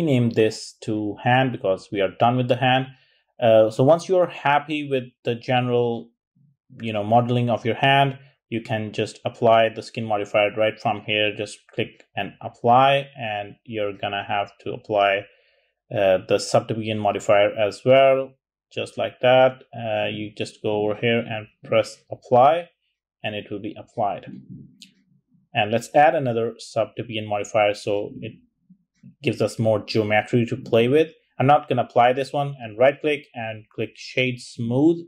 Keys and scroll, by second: 0.4-0.9 typing, 1.1 Return, 14.9 typing.